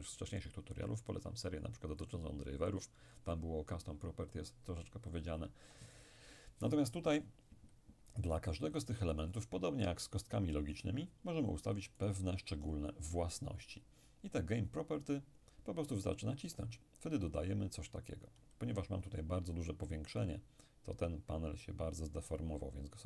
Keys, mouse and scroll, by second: 2.1 click, 9.2 right click, 12.0 right click, 16.6 click, 20.2 click.